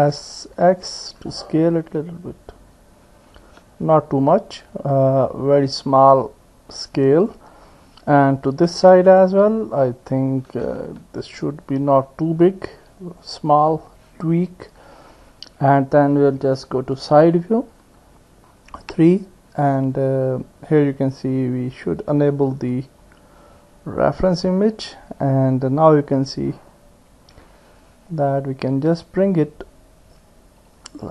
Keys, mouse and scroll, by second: 0.5 s, 8.2-9.3 drag, 10.6 s, 13.1-17.9 middle drag, 17.9 KP_3, 24.4 click, 28.2 click, 30.2-31.1 drag.